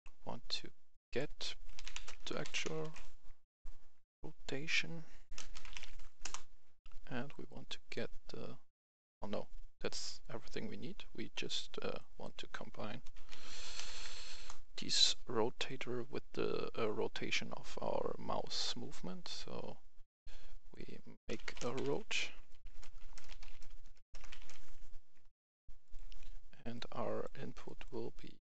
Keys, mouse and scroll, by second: 0.8 click, 1.6-2.7 typing, 5.2-5.9 typing, 6.1 Return, 7.4 click, 8.9 Escape, 11.8 click, 13.0-14.1 typing, 14.2 Return, 15.6-21.1 drag, 21.2-24.3 typing, 25.7 click, 27.5 right click.